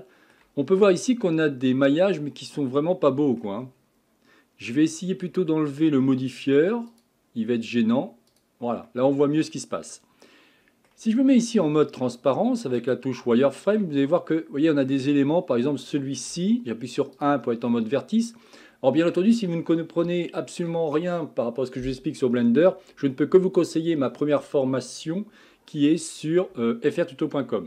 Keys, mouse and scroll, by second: 3.8-6.8 scroll down 1, 6.9 click, 8.3 click, 8.9-11.5 middle drag, 11.5 z, 13.4-16.3 shift+middle drag, 16.3 1, 17.2 click, 17.7-19.3 middle drag, 19.3 scroll down 2, 20.1-23.3 shift+middle drag.